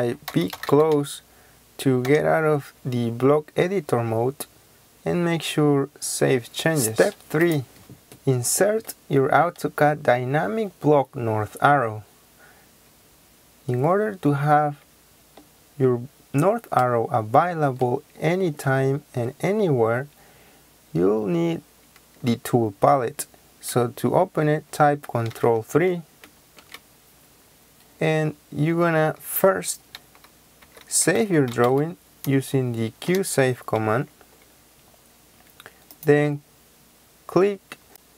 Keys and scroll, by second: 0.0-0.9 typing, 2.0 Return, 25.3 ctrl+3, 30.6-31.7 typing, 33.0 Return.